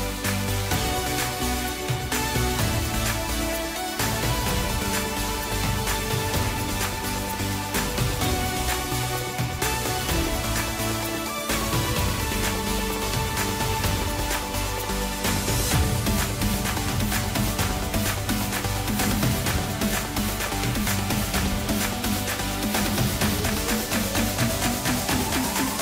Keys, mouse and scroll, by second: 2.6 scroll down 1, 3.8-5.6 scroll up 1, 5.6 shift+d, 10.6 shift+r, 10.9 shift+r, 11.5 shift+r, 11.9 shift+r, 13.8 shift+click, 14.4 shift+click, 15.0 shift+click, 15.7 shift+click, 16.2 shift+click, 17.5 shift+d, 21.1 shift+r, 21.3 shift+r, 21.5 shift+r, 22.0 shift+r, 23.3-24.6 middle drag, 24.6-25.3 scroll down 1, 25.3-25.7 scroll up 1, 25.7-25.8 scroll down 2.